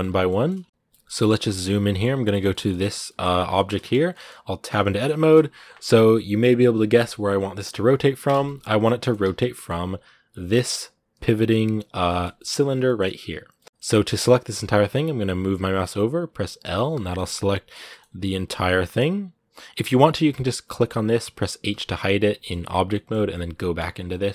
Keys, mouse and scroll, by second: 0.3-1.3 scroll up 3, 0.7 middle click, 1.3 shift+middle click, 1.8-2.1 scroll up 2, 2.1-3.8 shift+middle drag, 3.8 scroll up 1, 3.9 middle click, 4.4 Tab, 4.6-8.4 shift+middle drag, 8.4 z, 8.8 shift+middle click, 9.1 z, 9.3 middle click, 10.2 alt+right click, 11.2 g, 11.8 shift+middle click, 12.1 scroll up 1, 12.1-13.3 middle drag, 13.3 scroll up 1, 13.3-16.4 middle drag, 16.4 l, 17.0-18.1 middle drag, 18.1 z, 18.3-19.5 middle drag, 19.5 Tab, 19.7 scroll down 2, 20.7 right click, 21.5 h, 22.2 middle click, 23.1 right click, 23.5 Tab, 23.9-24.3 middle drag.